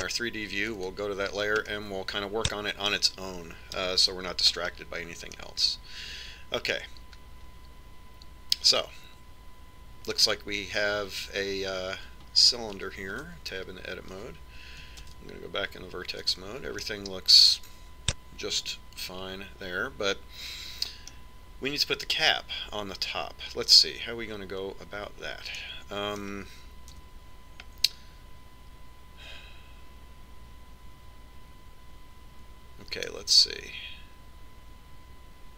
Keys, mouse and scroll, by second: 2.4 click, 3.4-5.1 middle drag, 5.3 middle click, 5.5 KP_Decimal, 6.3-9.0 middle drag, 12.5-14.7 middle drag, 14.9 Tab, 16.8 ctrl+Tab, 18.6-20.6 middle drag, 27.4-29.4 middle drag, 28.8 a, 34.9-35.5 middle drag.